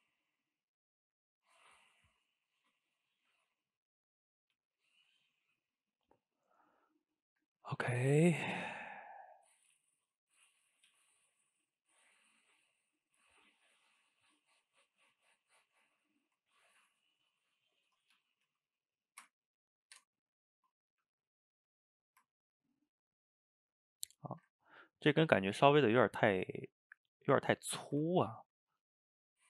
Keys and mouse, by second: 2.9 shift+click, 3.3 g, 4.4 click, 4.6 g, 5.7-7.6 middle drag, 7.6 a, 7.8 a, 8.1 click, 8.3 shift+click, 8.6 g, 9.8-10.9 middle drag, 10.9 g, 12.0-14.8 middle drag, 14.8 click, 15.0 g, 16.7 ctrl+t, 18.2 g, 20.5-21.0 middle drag, 21.0 g, 22.0-24.2 ctrl+middle drag, 24.2 shift+right click, 24.5-29.4 ctrl+middle drag.